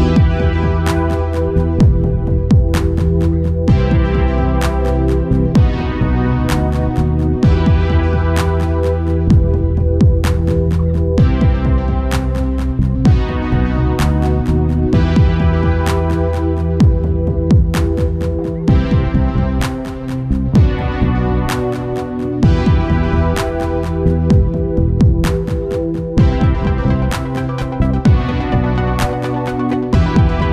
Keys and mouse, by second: 0.2 u, 0.8 Return, 3.6 click, 15.9-18.7 drag, 16.9 ctrl+s, 19.1 ctrl+s, 24.4 Tab, 26.3 ctrl+s, 27.2-29.6 drag.